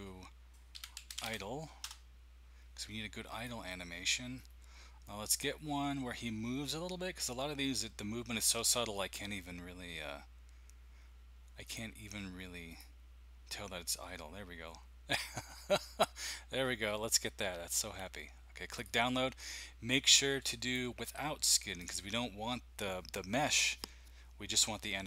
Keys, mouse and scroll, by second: 0.5-2.5 typing, 1.8 Return, 4.6-5.1 scroll down 2, 5.7 scroll down 1, 6.8-7.3 typing, 9.1 typing, 11.6 click, 12.7 click, 20.6 click.